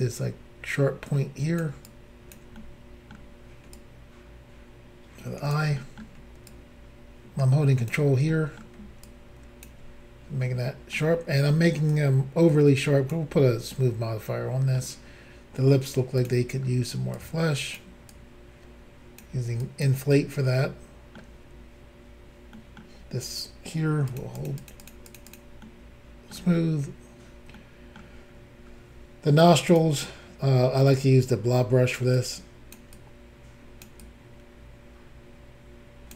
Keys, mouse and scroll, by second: 1.8 ctrl+click, 2.5 middle click, 3.7 ctrl+click, 5.8 middle click, 6.5 ctrl+click, 8.3 middle click, 9.0 ctrl+click, 10.4 middle click, 11.9 ctrl+click, 13.4 middle click, 16.2 click, 16.3 click, 16.6-17.1 scroll up 1, 17.1 click, 18.1 click, 19.6 click, 20.2 middle click, 22.5 middle click, 24.1 shift+click, 24.2 shift+click, 24.4 shift+click, 24.5 shift+double click, 24.6 shift+click, 24.7 shift+click, 24.8 shift+click, 24.9 shift+double click, 25.1 shift+click, 25.2 shift+click, 25.3 shift+click, 25.4 shift+double click, 25.6 middle click, 27.6 middle click, 27.6 scroll up 1, 28.3-28.9 scroll up 3, 29.7 click, 29.8 click, 31.0 ctrl+click, 32.1 ctrl+click, 32.9 ctrl+click, 34.0 ctrl+click.